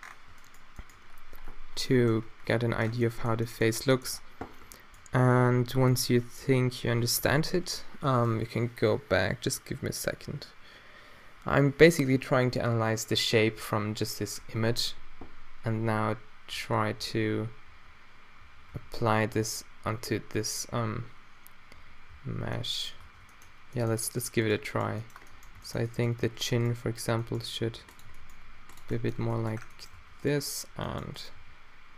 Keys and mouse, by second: 0.4 click, 0.9-3.5 middle drag, 15.2 1, 16.5-19.9 typing, 21.8 2, 22.1 1, 23.0 Tab, 24.0-24.6 drag, 27.1 g, 28.1 g, 29.2 Tab, 29.9 Tab, 30.2-31.6 middle drag, 31.4 g.